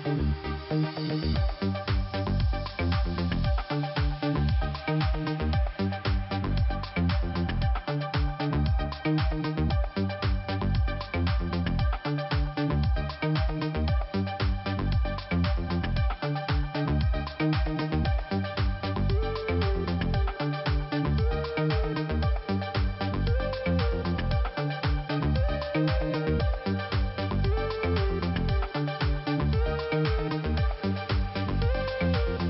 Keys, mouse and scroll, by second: 3.2 click, 6.4 middle click, 7.4 click, 14.1 click, 14.4 click, 14.5 double click, 14.8 double click, 15.0 double click, 15.3 double click, 15.4 double click, 17.0 click, 17.2 click, 17.3 double click, 18.1 middle click, 19.1 click, 21.9 middle click, 22.9 middle click, 28.5 middle click, 29.6 click.